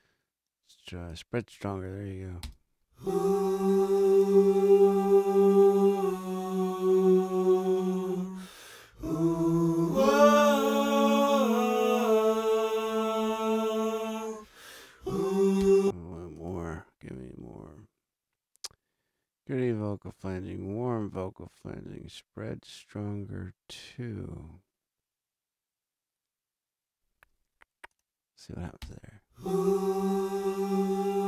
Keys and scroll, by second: 2.4 space, 15.6 space, 28.8 space.